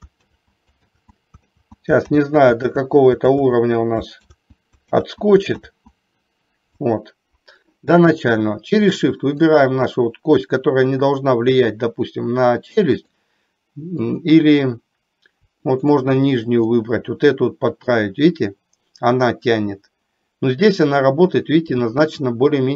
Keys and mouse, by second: 0.4 ctrl+z, 1.1 ctrl+z, 1.7 ctrl+z, 2.3 ctrl+z, 2.8 ctrl+z, 3.6 ctrl+z, 4.4 ctrl+z, 5.1 ctrl+z, 5.8 ctrl+z, 9.4 shift+click, 13.1 click, 14.2 click, 15.8 shift+click, 16.7-17.9 middle drag, 22.2-22.7 middle drag.